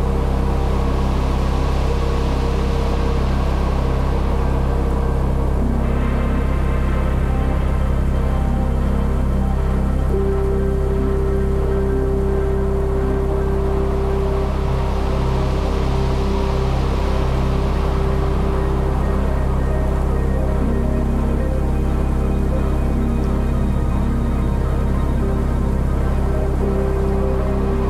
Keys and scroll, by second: 0.0-0.1 typing, 2.5 space, 4.5 v, 5.1 space, 7.4 shift+super+g, 12.8 b, 14.6 [, 16.3 [, 18.9 0, 21.6 space, 22.9 space, 24.0 space, 25.2 space, 26.5 space.